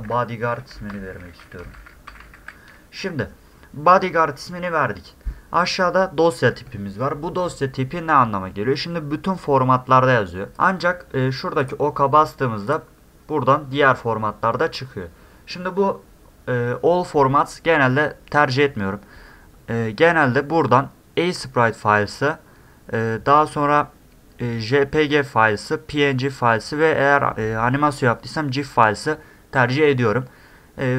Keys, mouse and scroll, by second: 1.1 d, 1.9 a, 2.3 d, 11.6 click, 12.7 click.